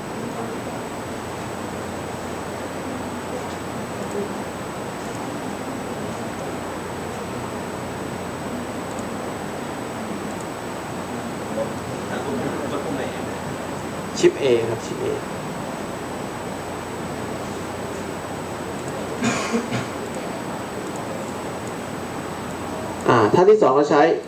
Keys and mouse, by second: 24.2 click.